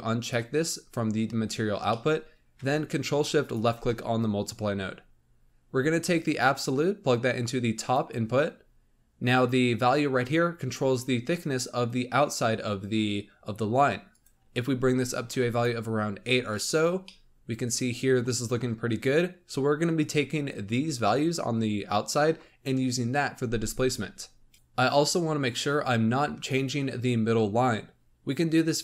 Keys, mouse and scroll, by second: 1.6-2.0 scroll down 1, 2.0-3.4 middle drag, 3.4 ctrl+shift+click, 6.1 click, 8.5 scroll up 3, 14.0-15.5 drag, 16.7 scroll down 1, 17.0-18.2 middle drag, 18.2-21.2 scroll up 1, 24.5-27.0 drag.